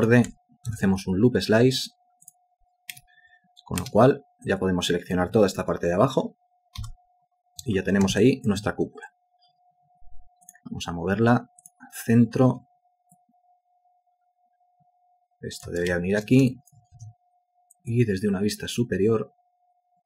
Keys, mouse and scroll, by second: 0.7 alt+c, 2.9 space, 6.8 Delete, 8.2 alt+shift+click, 12.5 w, 15.9 ctrl+space, 16.5 ctrl+alt+click.